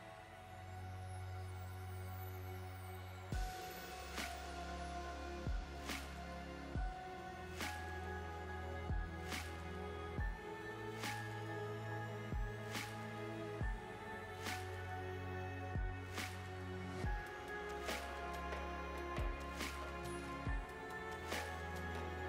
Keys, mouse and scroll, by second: 2.2 click, 2.4 middle click, 3.9-4.9 scroll down 2, 4.9-5.4 scroll down 4, 5.4 click, 5.6 click, 5.8-6.4 scroll down 4, 6.4 click, 7.3 scroll down 3, 7.5 middle click, 8.2 space, 10.2-10.9 scroll down 4, 10.9 space, 11.6 click, 11.8 click, 12.3-13.3 scroll up 10, 13.5 click, 14.0 space, 14.9 space, 15.7 click, 15.9 space, 18.1-18.4 scroll down 4.